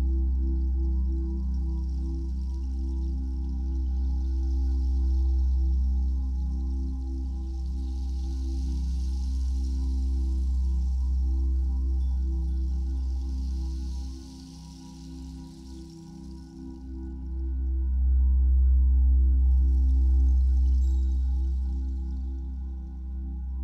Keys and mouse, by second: 0.3 ctrl+s, 2.1 click, 4.1 click, 6.2 click, 7.2 click, 8.9 click, 9.6 click, 10.4 click, 12.1 click, 15.1 click, 15.8 click, 16.7 click, 17.8 click, 20.1 alt+click, 21.0 alt+click.